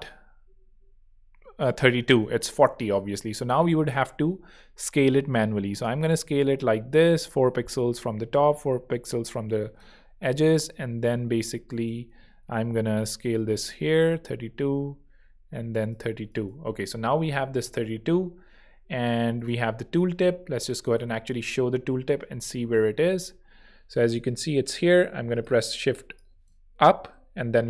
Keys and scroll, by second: 12.1 alt+shift+super+z, 12.9 alt+super+z, 16.7 alt+h, 17.0 alt+v, 20.9 0, 21.4 alt+shift+0, 22.4 alt+shift+Down, 23.2 alt+shift+Up, 23.6 alt+Down, 24.4 alt+shift+Up, 25.1 shift+z, 26.8 shift+Down, 27.3 shift+Up.